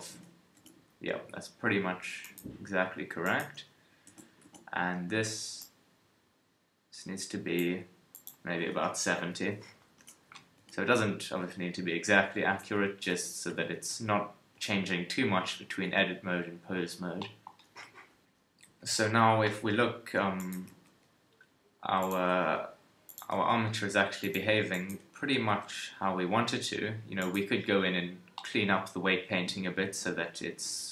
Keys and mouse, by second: 5.6-11.1 middle drag, 18.6 t, 20.7 g, 22.3 r, 23.3 g, 24.9 KP_1, 25.5 g, 29.6 KP_3.